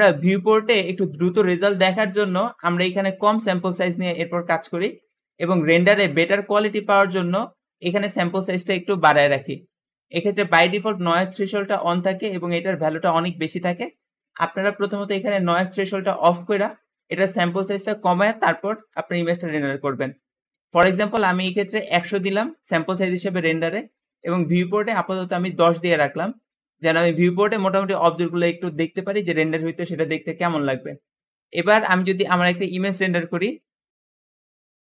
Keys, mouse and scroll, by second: 4.7-9.4 drag, 10.0 click, 15.9 click, 17.4-20.4 drag, 20.9 KP_1, 21.4 KP_0, 21.5 KP_0, 21.6 KP_0, 21.8 Return, 22.0 Return, 23.9-28.1 drag, 25.6-26.5 typing, 34.2 click.